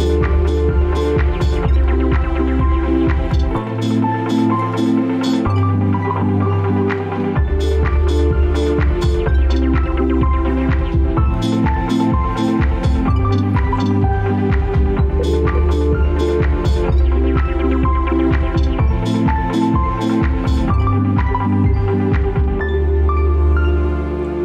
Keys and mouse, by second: 7.8 ctrl+z.